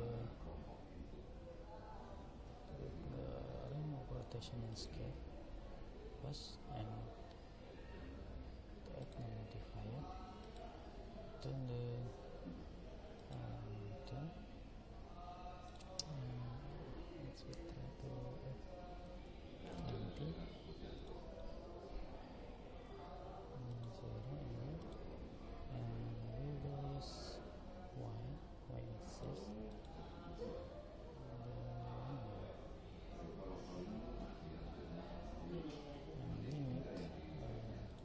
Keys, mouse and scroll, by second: 2.6 ctrl+a, 9.0-12.2 drag, 15.7 click, 21.0 click, 24.8 click, 29.7 click.